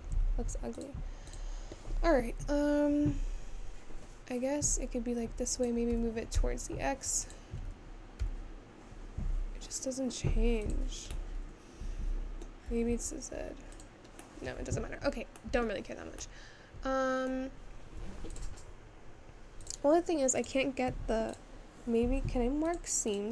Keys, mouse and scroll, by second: 0.2 ctrl+z, 0.8 click, 1.3 click, 3.0 r, 11.8-12.9 middle drag, 12.9 g, 15.2 ctrl+z, 15.6-18.9 middle drag, 18.9 click, 21.4-22.6 drag.